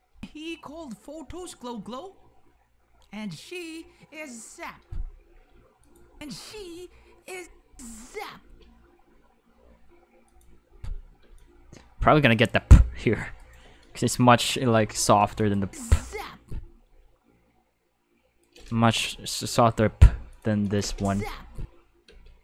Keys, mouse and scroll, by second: 0.1 space, 5.3 space, 5.8 click, 6.1 space, 7.4 space, 7.6 space, 8.4 space, 10.3 click, 10.6 space, 11.2 space, 11.4-12.5 drag, 13.4 right click, 14.6 k, 15.4 click, 15.6 space, 16.8 space, 18.4 right click, 18.9 g, 20.3 click, 20.6 click, 20.8 space, 22.1 space.